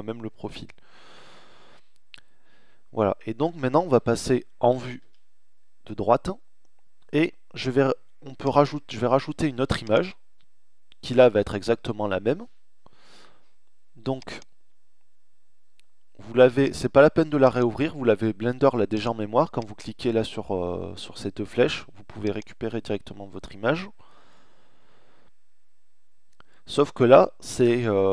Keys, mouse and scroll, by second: 4.0-5.2 middle drag, 4.0 KP_3, 7.4-10.7 middle drag, 13.1-15.0 middle drag, 16.4-17.6 middle drag, 18.3 middle click.